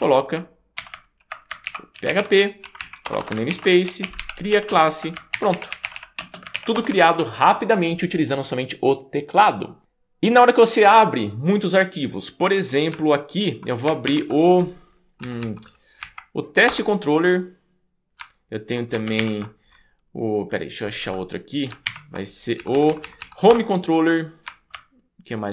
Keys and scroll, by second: 0.8-6.8 typing, 2.8 Right, 3.1 Return, 3.2 Return, 3.5 shift+super+g, 6.8 Return, 7.0 super+s, 14.2 super+p, 15.3 Down, 15.7 Down, 16.0 Up, 16.7 Return, 19.3 shift+super+p, 21.1 Escape, 21.9 super+p, 22.6 Down, 22.7 Down, 22.9 Down, 23.0 Down, 23.2 Down, 23.5 Return.